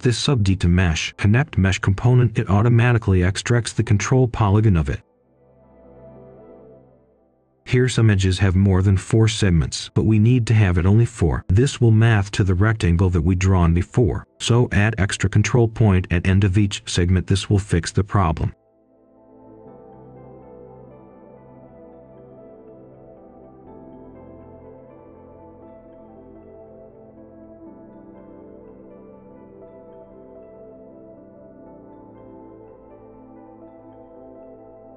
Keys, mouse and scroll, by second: 0.8 middle click, 1.4 click, 2.7 right click, 3.2-3.5 scroll down 1, 3.5-3.9 scroll up 1, 4.0-5.8 ctrl+right drag, 6.0 shift+right click, 6.4 click, 6.5 1, 6.6-7.1 click, 6.6 click, 7.0 click, 7.2 click, 7.4 5, 7.8-10.0 drag, 10.5 ctrl+shift+d, 10.6 ctrl+right click, 11.6 shift+right click, 12.8 shift+right click, 13.3 click, 14.6 Escape, 15.2 scroll down 1, 15.5 scroll up 1, 15.7 right click, 16.4-17.6 typing, 19.4-19.8 scroll up 1, 19.8 right click, 20.4-21.2 scroll up 1, 21.2 click, 25.7 right click, 26.7-27.5 scroll up 1, 28.2 click, 28.5 right click, 29.6-29.9 scroll down 1, 29.9 right click, 30.5 scroll down 1, 30.7 scroll up 1, 31.0-33.6 right drag, 33.6 scroll down 1, 33.8-34.2 scroll up 1, 34.2 scroll down 1, 34.3 scroll up 1, 34.7 right click.